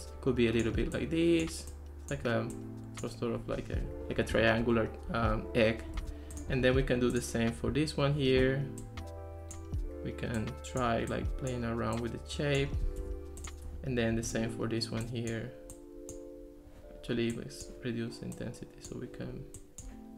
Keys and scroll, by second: 6.0 Escape, 13.0 Escape.